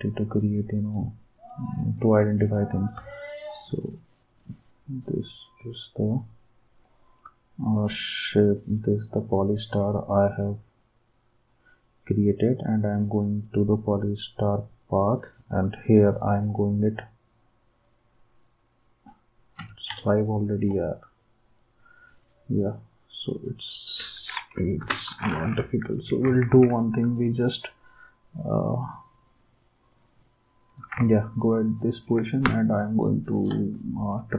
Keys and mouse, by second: 19.6 5, 19.9 Return, 24.8 Delete, 26.3 ctrl+s, 32.4 space, 32.9-33.3 space.